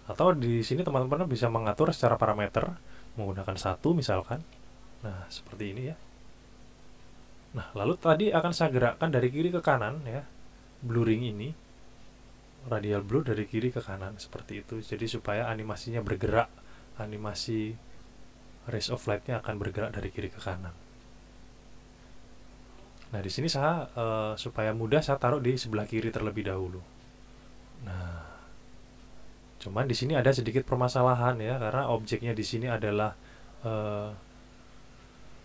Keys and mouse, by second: 2.5 click, 4.0 KP_1, 4.3 KP_Enter, 25.5-27.3 drag.